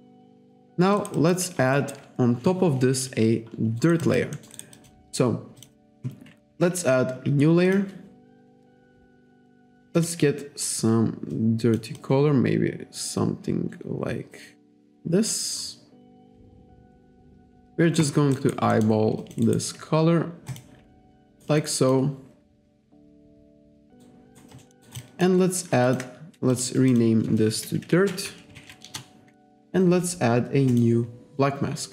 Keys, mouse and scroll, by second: 0.4 click, 1.0 alt+right click, 1.2 alt+click, 1.8 alt+right click, 3.8 alt+right click, 4.1 alt+click, 4.4 alt+middle click, 4.6 alt+right click, 5.6 click, 7.7 click, 10.0 click, 11.4 click, 12.0 click, 18.4 alt+right click, 18.8 alt+middle click, 19.3 alt+click, 19.5 alt+right click, 20.5 click, 21.0 alt+right click, 21.7 alt+click, 24.1 alt+right click, 24.7 alt+middle click, 24.9 alt+right click, 25.1 alt+click, 25.9 alt+click, 26.6 click, 27.0 click, 27.8-29.1 typing, 30.8 click.